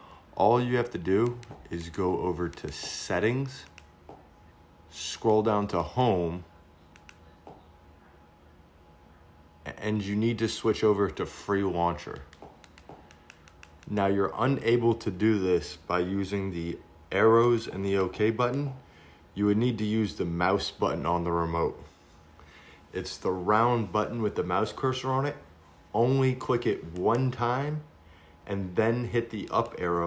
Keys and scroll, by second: 1.9 Return, 4.2 Down, 7.3 Return.